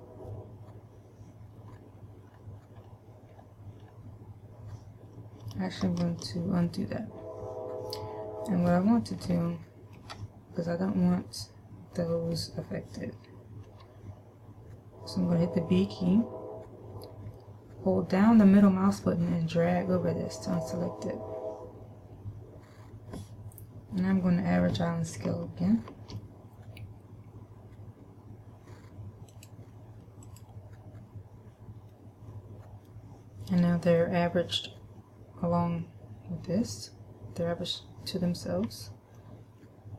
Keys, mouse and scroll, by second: 2.2-3.2 scroll down 4, 3.2-3.7 scroll down 1, 3.8-5.0 scroll down 2, 6.2 ctrl+z, 9.8 shift+middle click, 14.2 b, 25.7 shift+middle click, 29.7 click, 32.2 middle click, 39.5 middle click.